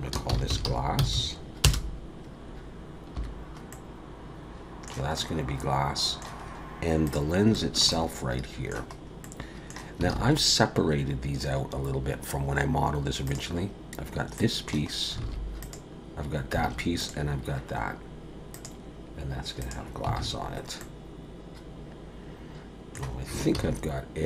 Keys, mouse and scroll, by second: 1.1 s, 3.2 /, 3.7 middle click, 5.2 middle click, 6.4-7.0 scroll up 2, 7.0 click, 7.5 shift+middle click, 7.9 middle click, 9.0-9.3 scroll up 2, 9.2 middle click, 10.1 alt+a, 11.5 scroll down 3, 13.3 click, 14.3 middle click, 14.9 scroll up 2, 15.2 alt+a, 15.6 click, 16.6 alt+a, 17.0 click, 18.5 click, 20.2 alt+a, 20.5-20.8 scroll down 1, 20.8 middle click, 23.6 ctrl+s.